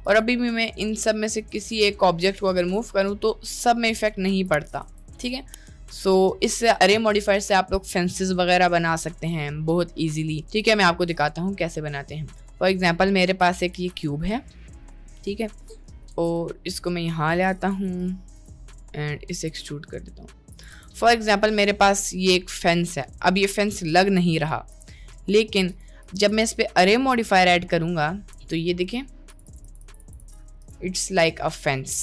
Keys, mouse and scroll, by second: 0.1 click, 0.8 g, 1.7 g, 4.4 g, 4.9 Tab, 5.2 middle click, 5.9 Tab, 6.3 middle click, 6.6 Tab, 10.4 a, 10.4 x, 10.9 shift+a, 12.9 middle click, 13.4 s, 15.7 middle click, 15.9 Tab, 16.1 ctrl+r, 17.8 3, 18.0 click, 18.9 middle click, 19.5 e, 20.7 Tab, 20.9-22.8 middle drag, 23.2 middle click, 24.8 drag, 25.2 middle click, 28.1 middle click, 29.3 click, 29.6 click, 31.2-32.0 middle drag.